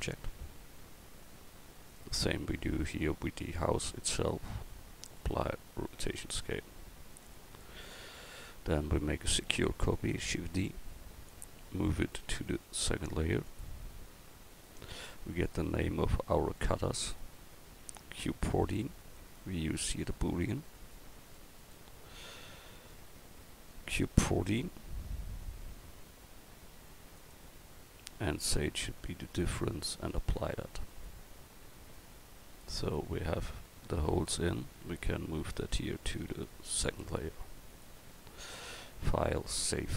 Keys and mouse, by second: 1.9-4.1 right drag, 9.5 shift+d, 12.2 m, 14.6-15.7 drag, 19.0-20.7 right drag, 20.7-22.9 drag, 23.9-30.1 drag, 32.9 middle click, 33.5 middle click, 36.3 m, 39.5 click.